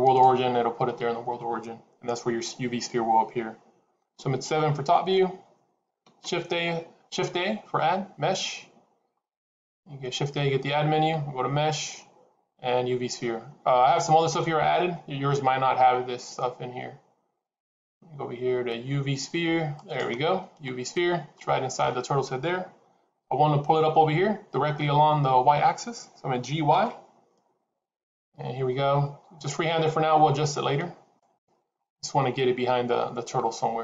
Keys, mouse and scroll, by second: 1.1-4.1 scroll down 1, 4.7 KP_7, 5.9 shift+a, 20.6 scroll down 1, 21.2 shift+middle click, 21.2 scroll down 4, 26.3 g.